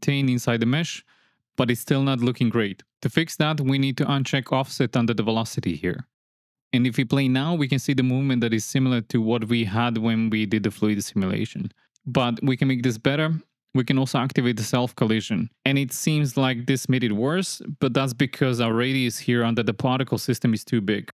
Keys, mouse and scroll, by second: 2.9 shift+Left, 2.9 space, 6.4 shift+Left, 7.1 space, 13.3 space, 13.7 shift+drag, 13.9 shift+middle click, 14.6 middle click, 17.3 shift+Left, 17.9 space.